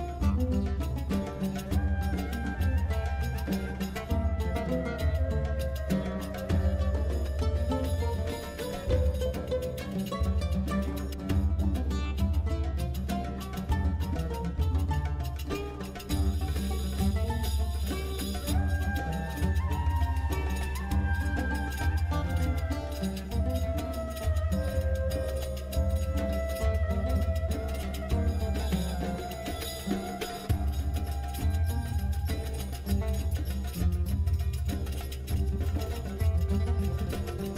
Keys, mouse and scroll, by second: 1.9-4.7 ctrl+drag, 4.9 click.